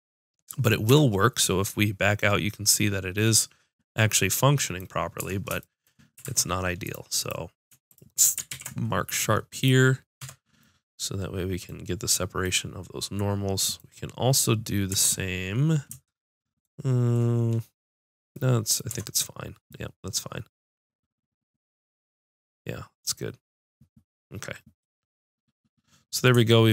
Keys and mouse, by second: 0.9 Tab, 5.2 Tab, 6.2 ctrl+Tab, 7.2-8.4 drag, 8.5 ctrl+e, 10.2 Tab, 14.9 Tab, 18.9 Tab.